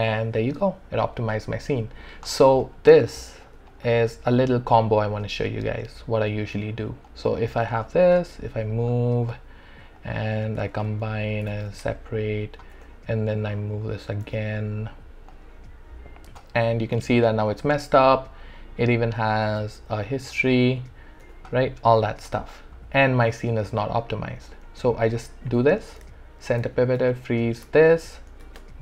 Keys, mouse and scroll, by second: 2.6 space, 2.7 alt+click, 3.2 alt+right click, 3.7 click, 4.4 alt+middle click, 5.7-7.1 drag, 7.5 e, 8.1 click, 10.7 alt+c, 11.7 alt+s, 12.2 click, 12.7 w, 13.5 click, 14.2 e, 14.5-16.4 drag, 16.4 w, 19.5 r, 20.3 click, 21.2 w, 23.8 alt+click, 23.9 alt+click, 26.5 ctrl+alt+c, 27.0 ctrl+alt+f, 27.7 ctrl+alt+d, 28.4 alt+`.